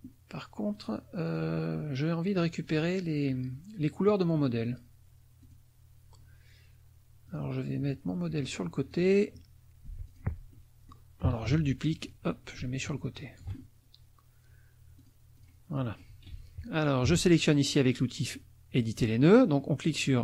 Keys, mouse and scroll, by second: 0.8 click, 1.2 click, 2.6 click, 5.4 click, 7.3 click, 8.9 click, 9.8 F1, 10.0 click, 10.6 middle click, 11.5 ctrl+d, 11.9-13.6 ctrl+drag, 15.0 click, 15.3 click, 15.7 middle click, 17.0 F2, 17.4 click, 18.8 click.